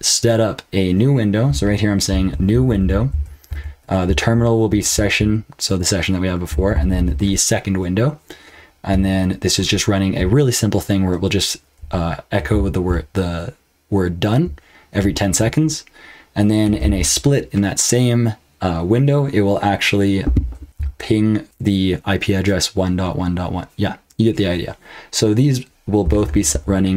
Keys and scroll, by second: 0.0-0.2 typing, 1.4-6.9 typing, 8.9-9.7 typing, 11.5-16.8 typing, 20.7-21.5 typing, 25.8-26.9 typing.